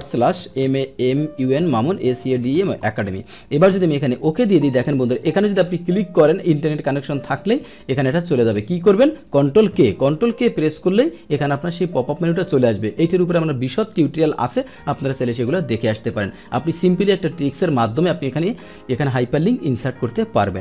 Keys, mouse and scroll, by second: 3.7 Return, 8.5 click, 9.4 ctrl+click, 9.7 ctrl+k, 10.5 ctrl+k.